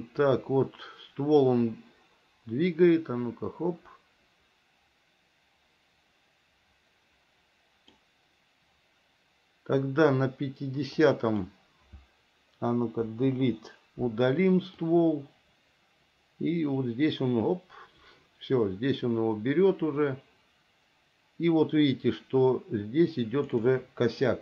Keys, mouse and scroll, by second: 11.2 click, 13.3 Delete, 15.1-23.8 drag.